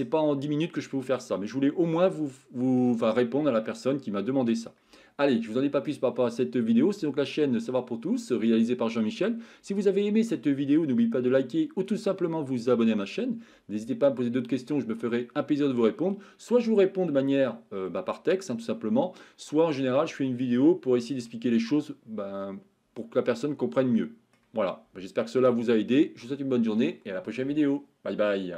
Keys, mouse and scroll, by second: 2.0-2.8 shift+middle drag, 3.7-4.7 middle drag, 21.4-24.4 middle drag, 26.2-26.7 shift+middle drag.